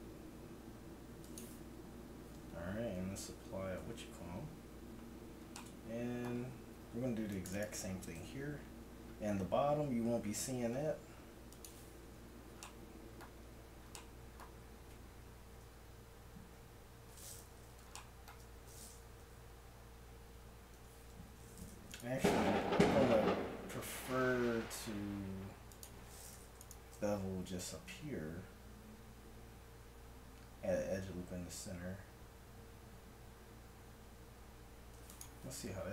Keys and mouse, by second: 1.5 Tab, 3.0 ctrl+1, 3.8 Tab, 6.7 ctrl+r, 8.2 ctrl+b, 11.9 Tab, 15.6 Tab, 19.3 Tab, 20.9 Tab, 22.6 x, 26.6-27.6 right drag, 27.6 ctrl+b, 35.4 Tab.